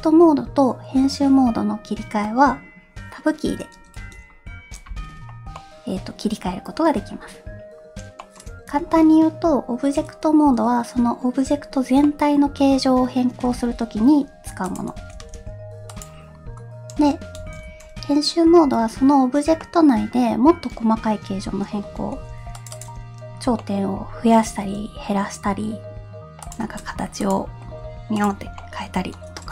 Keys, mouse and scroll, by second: 4.0 Tab, 5.5-6.8 middle drag, 8.2 middle click, 8.8 Tab, 12.0-12.9 middle drag, 13.4 s, 15.1 s, 16.3-16.7 scroll up 1, 17.4 s, 18.6 Tab, 19.6-20.1 middle drag, 20.6-21.2 scroll up 1, 22.1 ctrl+r, 23.6 middle click, 24.6 s, 27.2 click, 27.6 g, 28.6-29.5 middle drag.